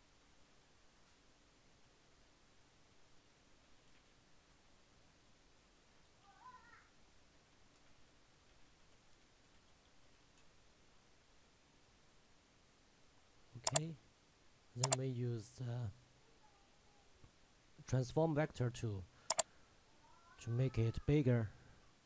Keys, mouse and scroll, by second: 3.3-4.5 typing, 6.0-10.8 typing, 11.1 ctrl+a, 17.3 click, 19.5 shift+Num_Lock, 19.5 shift+click.